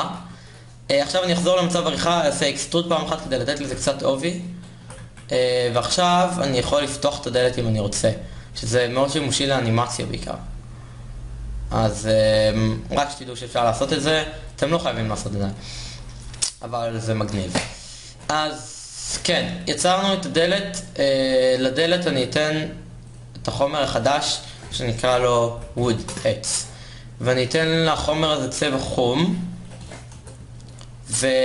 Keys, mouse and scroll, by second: 1.7 Tab, 2.5 a, 2.8 a, 3.8 e, 4.8 Tab, 5.3 z, 15.6 z, 21.1 KP_1, 27.2 o.